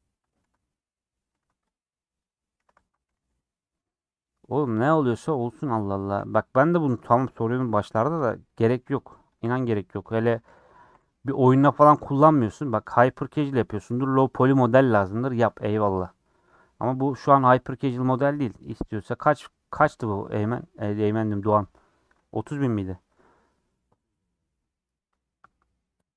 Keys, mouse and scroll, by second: 0.0 middle click, 0.3 scroll up 1, 0.4 3, 0.7-1.7 middle drag, 1.7 click, 3.8-5.3 middle drag, 5.3 ;, 6.3 middle click, 6.9 3, 7.2 Left, 7.8 2, 8.3 Left, 8.5 middle click, 9.4 shift+Left, 9.8-10.9 middle drag, 10.9 /, 11.6 Tab, 11.9 h, 12.6 Left, 13.4 /, 13.8-18.7 middle drag, 18.7 /.